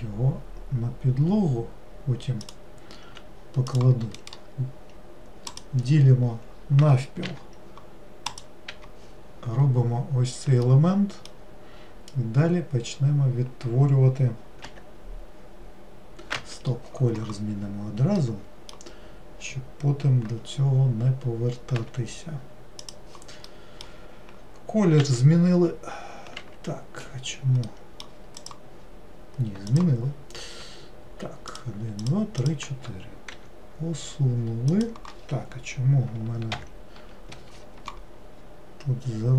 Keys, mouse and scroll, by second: 3.8 click, 5.8-7.3 right drag, 7.3 n, 8.4 click, 8.8 n, 9.7-10.8 scroll up 1, 10.8-13.8 middle drag, 18.3-21.5 middle drag, 23.6-25.1 middle drag, 25.1 e, 27.8 middle click, 28.5 click, 29.8 click, 31.6 shift+click, 32.1 shift+click, 32.5 shift+click, 33.5 e.